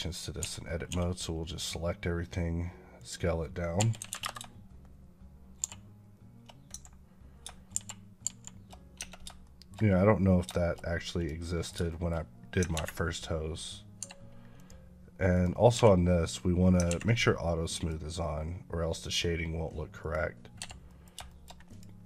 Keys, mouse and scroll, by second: 0.7 s, 2.8 click, 3.6 r, 3.8 KP_9, 4.1 KP_Enter, 5.5 shift+r, 9.3 shift+middle click, 10.4 shift+double middle click, 10.7 scroll up 1, 11.0 click, 11.3 middle click, 11.7 shift+middle click, 13.8 Escape, 14.4 click, 15.6 q, 17.6 click, 20.4 Escape, 20.7 middle click, 21.1 shift+middle click, 21.5 click.